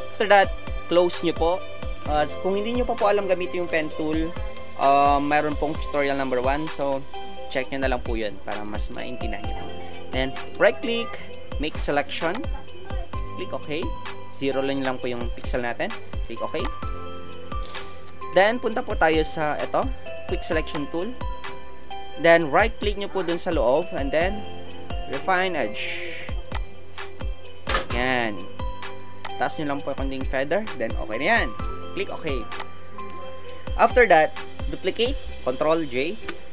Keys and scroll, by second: 15.5 KP_0, 16.0 KP_0, 36.2 ctrl+j.